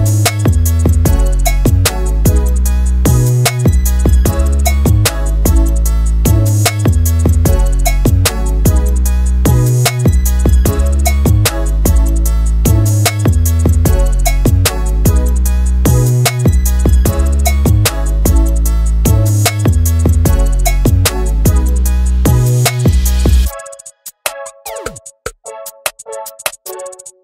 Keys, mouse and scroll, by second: 0.2-0.9 drag, 9.3 click, 9.6 click, 10.4 click, 10.6 click, 11.3 click, 11.8 click, 13.5-14.0 scroll down 2, 14.0 z, 14.4 scroll down 2, 14.6-15.3 scroll up 4, 14.9 shift+middle click, 15.9 click, 17.8-19.4 shift+drag, 22.5 ctrl+space, 22.7-23.2 scroll down 1, 23.2 scroll down 1, 23.4 ctrl+alt+b.